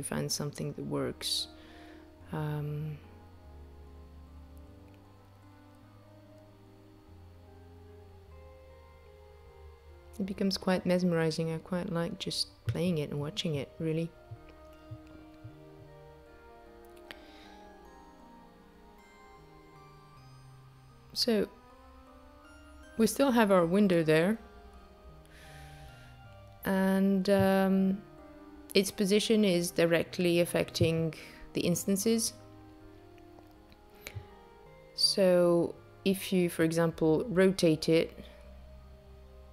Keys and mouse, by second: 16.0 space, 18.1 click, 18.8 click, 19.6 click, 20.3 click, 25.4 click, 34.8 r.